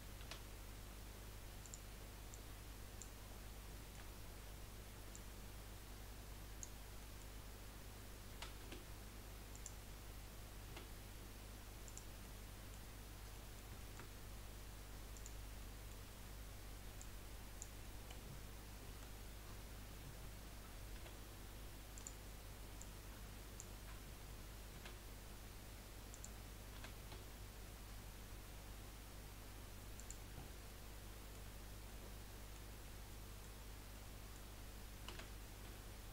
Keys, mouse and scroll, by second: 0.2 s, 2.3 click, 3.3-3.7 scroll up 2, 3.7 shift+middle click, 4.1-4.5 scroll up 2, 5.1 click, 7.0-8.3 middle drag, 8.3 s, 10.7 s, 12.2-15.2 middle drag, 15.2 click, 15.7 middle click, 16.1-16.4 scroll up 1, 17.0 click, 17.8-18.9 middle drag, 18.9 KP_1, 19.6-20.1 scroll up 1, 20.1 scroll up 1, 21.1 s, 22.8 click, 24.9 s, 27.1 s, 30.4-30.8 scroll down 3, 30.8 middle click, 31.5 scroll up 1, 31.9-33.6 middle drag, 33.6 scroll up 1, 33.9-35.6 middle drag, 35.6 s.